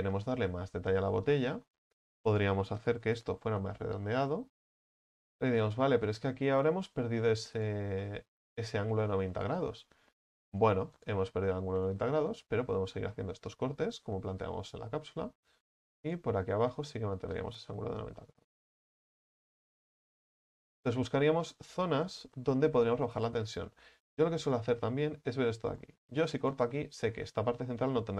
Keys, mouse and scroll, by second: 0.5 ctrl+z, 0.8 ctrl+z, 1.7-3.1 middle drag, 3.1 ctrl+b, 5.6-7.6 middle drag, 7.6 right click, 8.0-10.5 middle drag, 10.5 alt+shift+right click, 11.0 alt+shift+right click, 12.2 alt+shift+right click, 12.6-16.1 middle drag, 16.1 alt+shift+right click, 16.9-19.1 middle drag, 19.1 u, 19.4-20.2 scroll down 6, 20.2-20.6 scroll down 1, 20.6-21.6 shift+middle drag, 21.6-22.1 scroll down 4, 22.1-23.5 shift+middle drag, 23.5-24.6 scroll up 4, 24.6 right click, 25.8 right click, 26.4 alt+shift+right click, 27.1 scroll down 7.